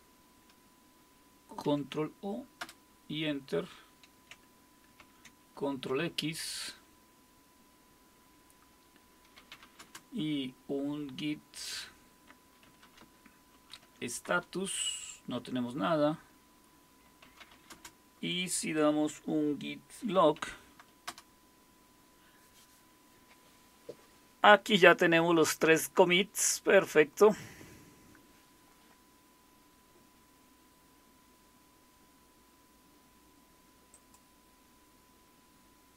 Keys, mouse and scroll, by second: 1.3 ctrl+c, 1.7 ctrl+o, 2.6 Return, 5.0 ctrl+x, 9.1-10.1 typing, 12.4-13.5 typing, 13.8 Tab, 14.3 Return, 17.0-18.0 typing, 19.9-21.0 typing, 21.1 Return, 33.9 click.